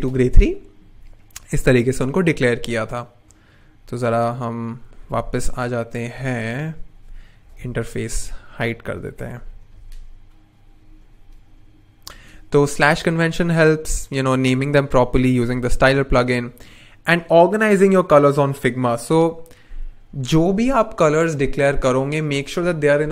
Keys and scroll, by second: 7.9 super+\, 9.6 super+\, 11.0 n, 15.8 n.